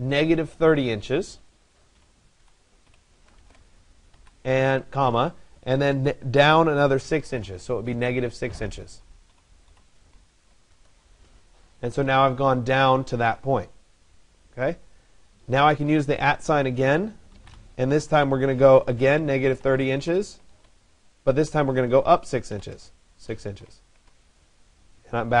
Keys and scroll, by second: 10.3 Return, 23.5 Return.